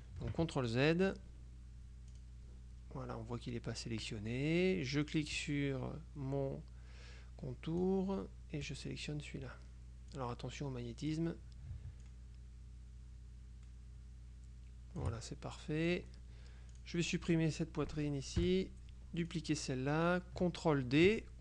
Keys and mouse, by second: 0.0 ctrl+click, 0.4 ctrl+z, 0.8 ctrl+click, 2.2 click, 5.4 click, 8.0-9.3 drag, 10.2-11.7 drag, 12.2-15.6 ctrl+shift+drag, 16.0 click, 16.8 click, 18.5 Delete, 19.4 click.